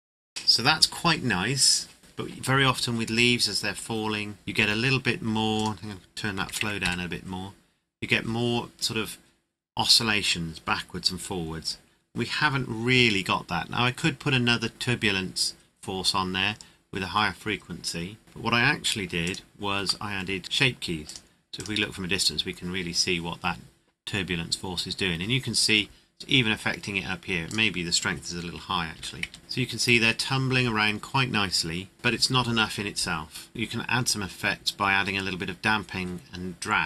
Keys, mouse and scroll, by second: 5.5 click, 6.4 KP_Decimal, 6.6 KP_2, 6.8 KP_Enter, 19.2 click, 20.0 middle click, 21.0 click, 27.4 click, 28.9 KP_4, 29.2 KP_Enter, 31.9 click, 33.5 click.